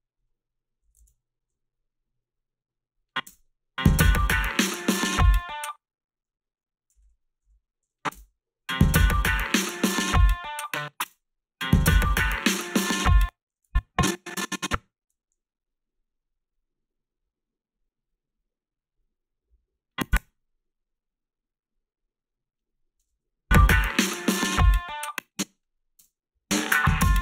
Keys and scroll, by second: 1.0 ctrl+z, 3.3 space, 5.4 space, 7.0 ., 7.4 ., 8.1 space, 10.6 space, 11.0 space, 13.0 space, 20.1 space, 23.0 space, 24.9 space, 26.0 space.